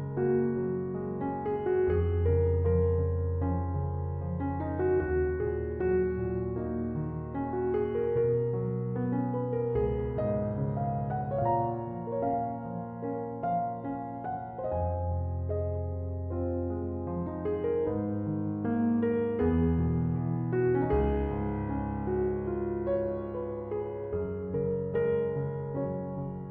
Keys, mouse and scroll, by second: 1.2-10.4 drag, 10.4-11.3 scroll up 1, 11.3-12.6 scroll up 1, 12.6-18.4 drag, 18.4-21.0 middle drag, 21.0-24.1 drag, 24.6-26.5 drag.